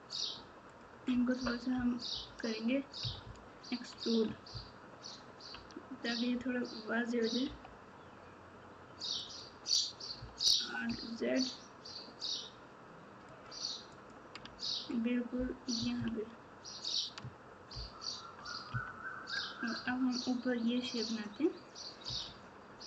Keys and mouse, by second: 1.7 KP_4, 2.1 KP_4, 3.0 KP_Subtract, 3.2 KP_Subtract, 4.5 ctrl+KP_6, 5.0 ctrl+KP_6, 13.9 click, 14.4 Tab, 15.7 KP_6, 15.9 KP_6, 17.7 ctrl+KP_4, 18.7 KP_3, 19.8 Tab.